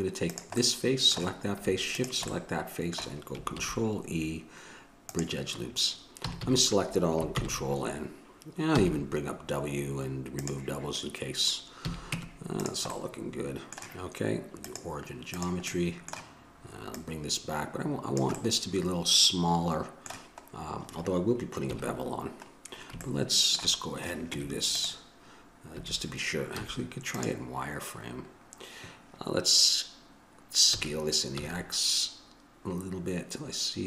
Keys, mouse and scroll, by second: 3.8 ctrl+e, 6.5 a, 6.6 a, 7.6 ctrl+n, 9.0 w, 12.1 a, 12.3 Tab, 13.1-15.7 middle drag, 15.7-18.4 drag, 18.6-21.9 drag, 21.9 KP_1, 24.5 Tab, 25.9 a, 26.8 z.